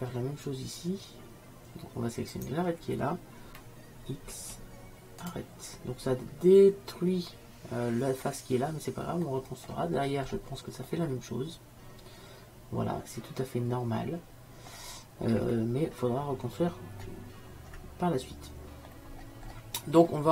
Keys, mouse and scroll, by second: 4.4 x, 10.1 middle click, 11.3 middle click, 12.1 middle click, 15.4-17.9 middle drag, 18.8 middle click, 20.2-20.3 middle drag.